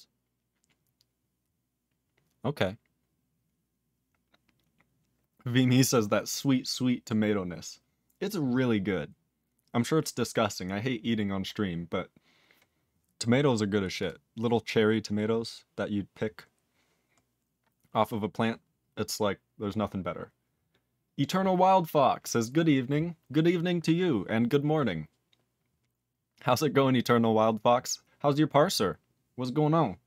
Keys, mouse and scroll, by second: 14.0 click, 14.0 click, 16.3 scroll down 2, 17.4 scroll down 2.